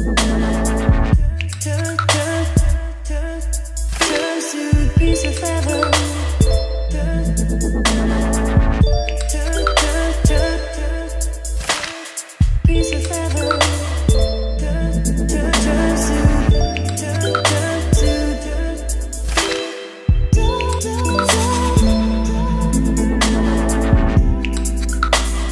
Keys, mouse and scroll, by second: 2.9 click, 4.1-25.5 drag, 25.3-25.5 typing.